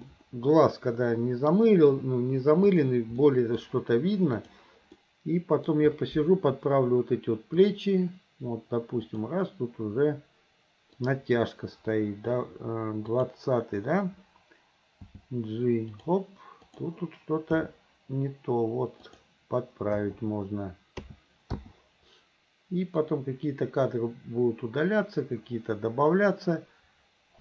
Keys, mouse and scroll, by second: 0.1-1.5 middle drag, 2.7 click, 3.3 middle click, 4.4 click, 5.0 middle click, 5.6 middle click, 7.7 click, 9.1 click, 11.0 click, 13.2 click, 15.1 g, 16.7 click, 17.6 g, 20.0 i, 21.1 a, 21.6 i, 23.1-27.4 drag.